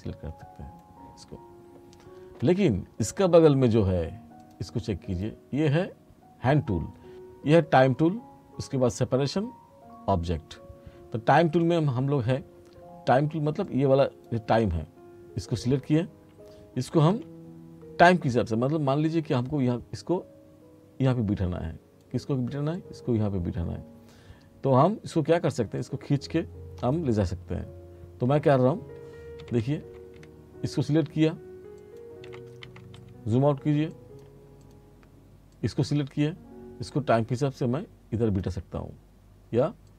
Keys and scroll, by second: 16.9 r, 29.5 t, 32.3 r.